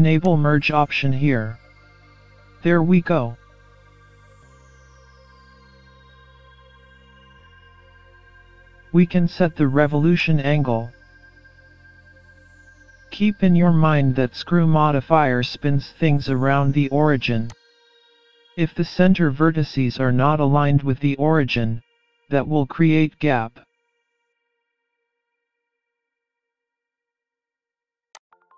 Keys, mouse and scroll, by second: 0.2 click, 0.9-1.2 scroll down 3, 1.6 middle click, 4.2-4.6 scroll down 4, 4.7 scroll up 1, 4.8 scroll down 1, 5.2 scroll up 2, 8.9 middle click, 10.2 click, 15.9 middle click, 17.5 click, 25.2 KP_7, 26.4 scroll down 2, 26.8 scroll up 4, 28.2 click.